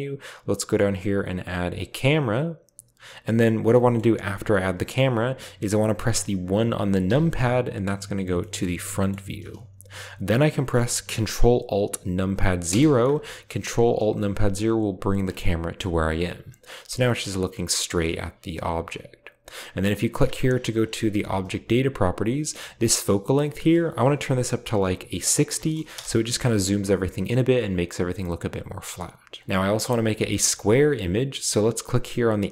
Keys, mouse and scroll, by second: 1.7 click, 3.2-4.0 drag, 3.8 middle click, 7.0 KP_1, 8.4-9.6 shift+middle drag, 12.7 ctrl+alt+KP_0, 16.1 click, 20.8 click, 21.6 click, 23.2 click, 25.5 typing, 25.9 Return, 30.2 click.